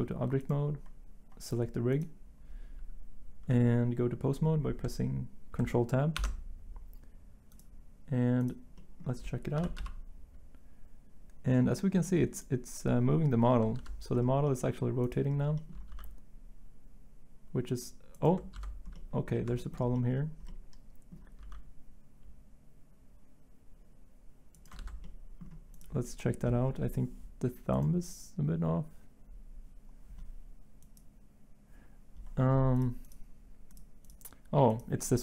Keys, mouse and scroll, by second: 6.2 ctrl+Tab, 9.6 r, 9.8 x, 13.8 ctrl+z, 15.9 g, 18.5 ctrl+z, 24.8 ctrl+z.